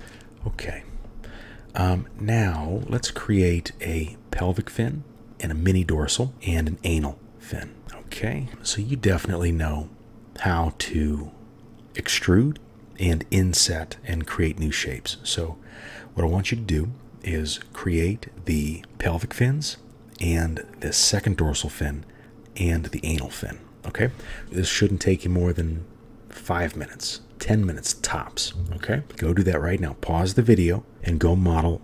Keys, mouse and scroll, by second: 0.0 KP_1, 0.0 KP_3, 2.4 shift+middle click, 3.2 shift+click, 7.8 KP_3.